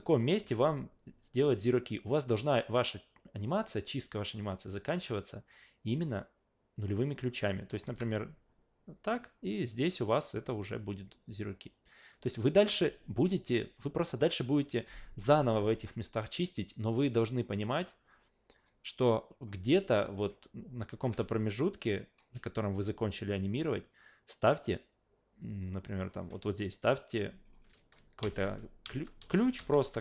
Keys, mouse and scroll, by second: 0.1 click, 0.4 a, 1.4-7.7 drag, 7.8 s, 8.3-9.1 drag, 9.9 click, 11.0-12.7 drag, 15.0-17.7 drag, 18.6 right click, 19.4 click, 20.7 click, 21.0 a, 22.7-26.1 drag, 27.8 alt+middle click, 28.2-30.0 typing.